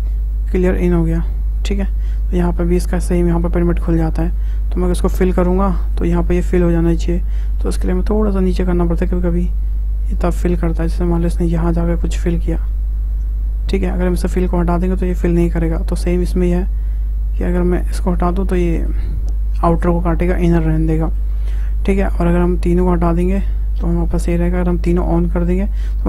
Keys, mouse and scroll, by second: 0.7-2.9 middle drag, 2.9-5.2 drag, 5.9-7.9 middle drag, 7.9 click, 12.4-14.6 middle drag, 14.6 click, 15.5 click, 16.3 click, 17.5 click, 18.4-22.4 middle drag, 22.4 click, 22.8 click, 24.9-25.7 drag, 25.7-26.0 middle drag.